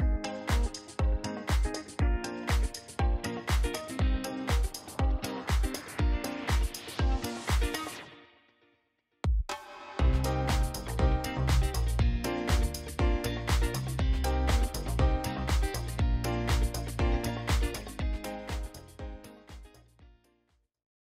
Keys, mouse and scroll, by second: 0.6 click, 3.6-5.5 drag, 6.9-7.4 typing, 8.7 click, 11.3 click, 13.4 right click, 14.4 ctrl+right click.